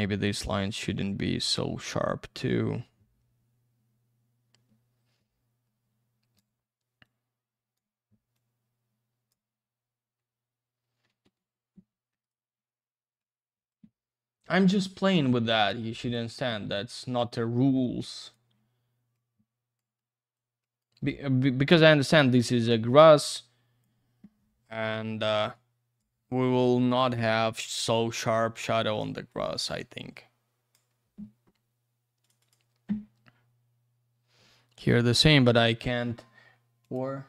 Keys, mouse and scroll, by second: 11.1 ctrl+z, 12.2 right click, 12.3 right click, 13.2 click, 14.7 click, 14.8 click, 16.0 shift+click, 16.1 shift+click, 16.7 click, 19.1 click, 20.0 click, 20.6 click, 20.8 click, 22.4 click, 25.5 click, 26.6 click, 27.4 click, 28.6 click, 29.3 click, 30.1 click, 32.2 click, 32.3 click, 32.4 click, 32.5 double click, 36.8 click, 36.9 click.